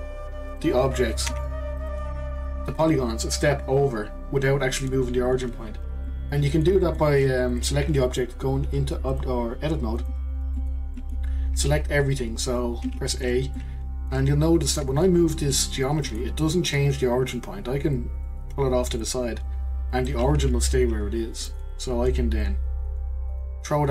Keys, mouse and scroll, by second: 0.5 click, 1.3 Delete, 1.8 click, 2.0 Delete, 2.4 click, 6.1-7.2 middle drag, 7.2 click, 7.5 click, 9.1-10.6 drag, 10.6-12.8 middle drag, 12.8 a, 13.6-14.7 middle drag, 14.7-16.0 scroll up 1, 16.0-17.9 middle drag, 17.9 click, 20.4 Tab, 21.4-22.4 drag.